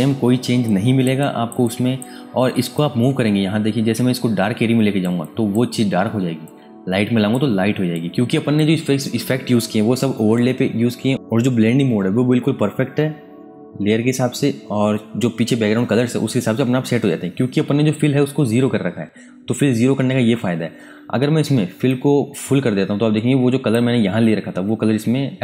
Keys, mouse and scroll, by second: 0.3 space, 0.6 ctrl+alt+click, 1.6 click, 5.2 click, 21.8 click.